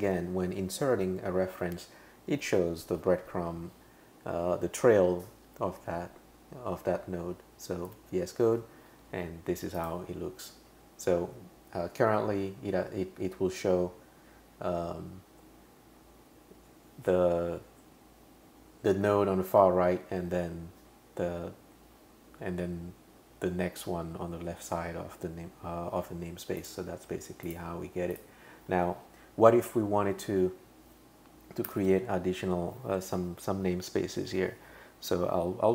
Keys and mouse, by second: 7.9 Return, 9.8 o, 26.6 click, 27.5 click, 28.1 click, 31.7 typing.